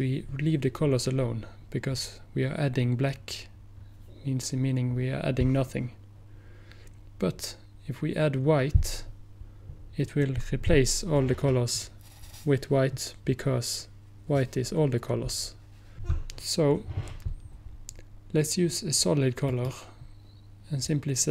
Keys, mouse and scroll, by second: 19.5 click, 20.5 click.